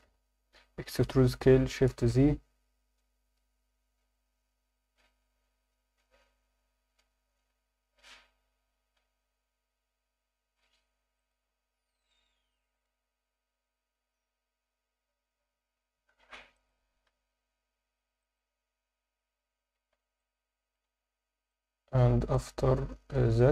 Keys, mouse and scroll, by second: 0.0 Escape, 0.9 e, 1.2 s, 2.0 shift+z, 8.8 s, 11.2 click, 17.0 click, 17.0 s, 18.2 click, 19.7 Tab, 19.8 scroll down 1, 20.2-20.7 alt+middle drag, 20.8 Tab, 21.0 scroll up 1, 21.5 alt+middle click.